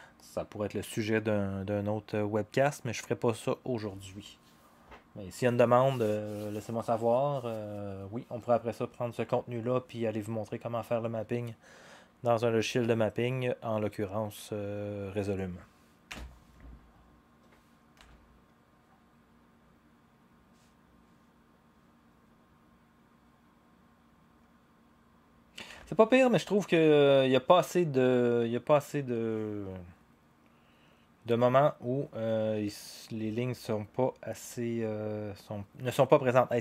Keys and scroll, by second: 16.1 0, 18.0 0, 25.8 0.